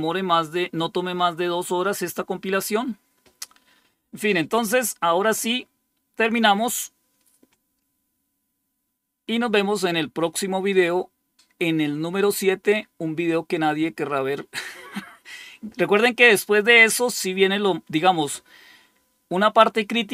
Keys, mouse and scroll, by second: 16.3-17.7 scroll down 6, 17.7-18.8 scroll down 1, 18.8 scroll down 1.